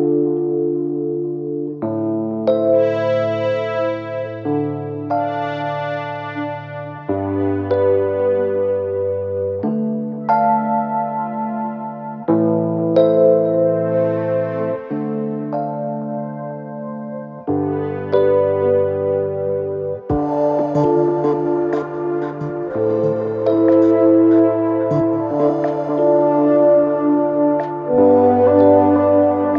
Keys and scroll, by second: 0.0-0.2 typing, 6.8-7.7 typing, 9.6-10.4 typing.